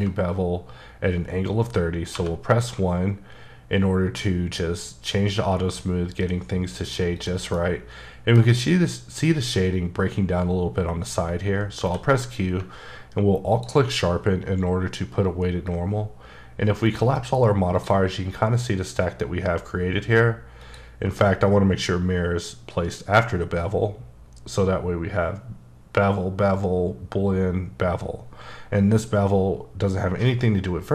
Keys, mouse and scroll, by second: 2.1 1, 7.2 click, 7.5 middle click, 12.5 alt+q, 13.5 alt+click, 16.8 click, 17.7 click, 20.6 click.